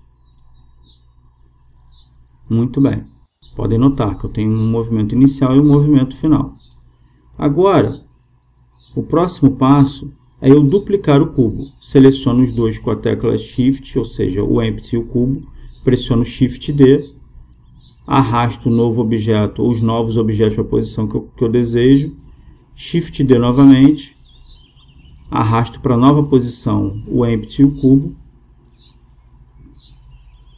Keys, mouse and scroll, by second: 1.8-6.0 drag, 9.3-11.0 drag, 12.2-14.9 right drag, 15.3 shift+d, 22.1-24.5 right drag, 24.8 shift+d, 26.5-28.4 drag.